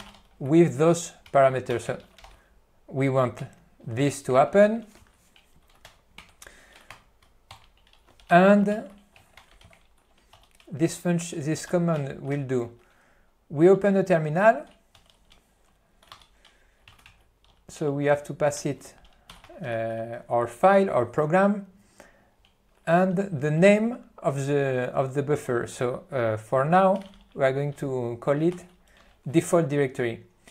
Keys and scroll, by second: 0.3 n, 2.0 a, 2.5 ctrl+n, 3.5 o, 4.1 p, 4.4 o, 5.0 F3, 5.9-9.2 typing, 17.6 Tab, 18.7 Return, 19.3-20.4 typing, 28.6 ., 29.1 Return.